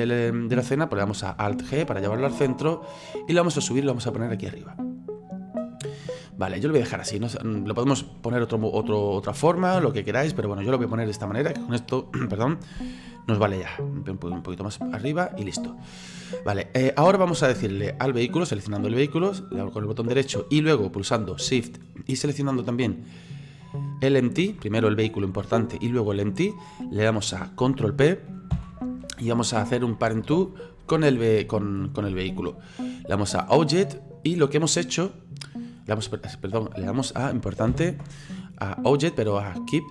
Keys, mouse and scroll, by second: 1.6 alt+g, 3.1-4.8 drag, 4.8-14.1 middle drag, 14.1-19.3 drag, 19.3 right click, 23.5 shift+right click, 28.5 ctrl+p, 37.7 ctrl+p.